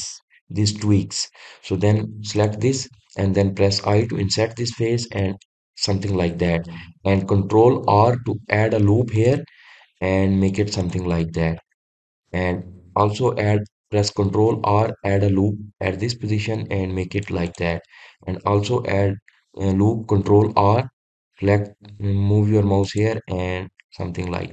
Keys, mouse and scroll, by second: 3.0 click, 6.3 click, 8.5 ctrl+r, 11.4 click, 12.2-14.9 middle drag, 14.9 ctrl+r, 18.0 click, 20.8 ctrl+r.